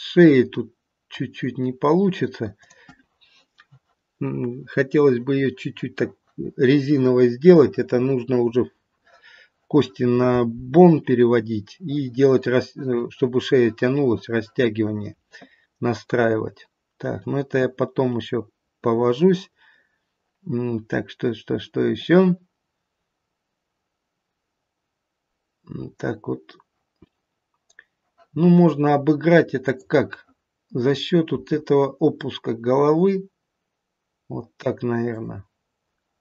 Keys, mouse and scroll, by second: 2.5 click, 29.6 click, 31.3 r.